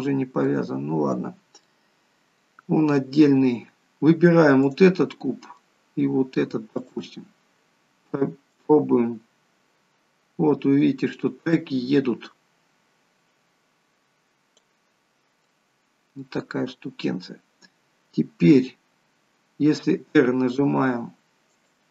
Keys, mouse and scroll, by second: 3.0-4.7 scroll up 1, 4.7 click, 5.1 middle click, 6.8 shift+click, 7.3 scroll down 2, 8.5 click, 15.5 middle click, 16.6-17.0 scroll down 1, 19.8 r.